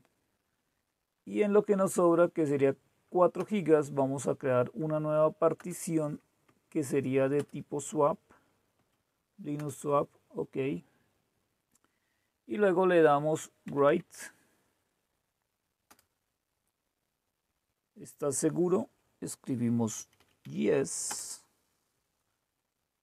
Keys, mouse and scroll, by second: 3.4 Return, 5.6 Return, 6.4 Right, 7.3 Return, 8.7 Up, 9.5 Return, 13.7 Right, 13.8 Right, 14.0 Right, 15.9 Return, 19.7-20.8 typing, 21.0 Return.